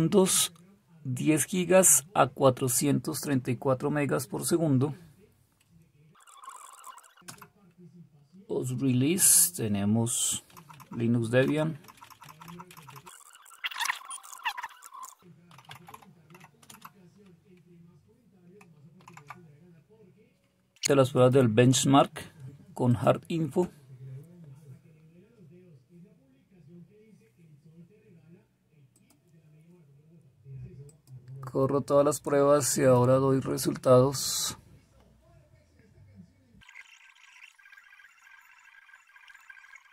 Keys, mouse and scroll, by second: 6.1-6.7 Up, 6.8 Down, 6.9 Down, 7.2 Return, 7.8 typing, 10.5 Page_Up, 11.8 Up, 12.2-13.5 Up, 13.5 Down, 13.9-17.2 typing, 19.0 super+w, 19.3 typing, 37.7-39.9 typing.